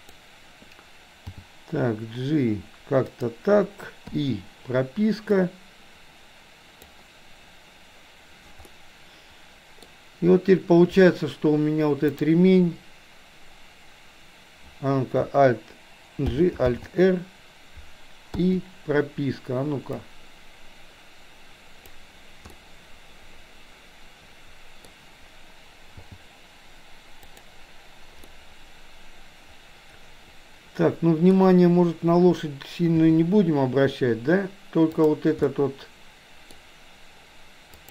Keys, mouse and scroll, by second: 1.3 g, 4.2 i, 5.3-7.0 drag, 8.7-10.0 middle drag, 16.3 alt+g, 16.7 alt+r, 18.5 i, 20.1-22.0 drag, 22.6 middle click, 23.5-25.0 middle drag, 26.0 g, 28.5-31.5 middle drag, 33.1 i, 35.1 click, 35.6-36.6 middle drag.